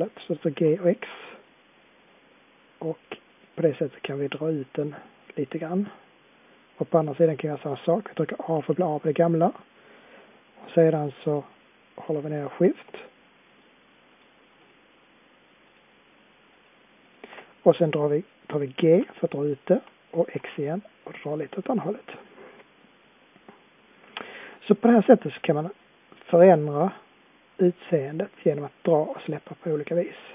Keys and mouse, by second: 0.8 middle click, 1.0 middle click, 5.9-8.5 middle drag, 8.5 a, 18.8 g, 21.0 middle click, 25.2 middle click, 26.4-27.4 middle drag, 28.9-30.3 middle drag.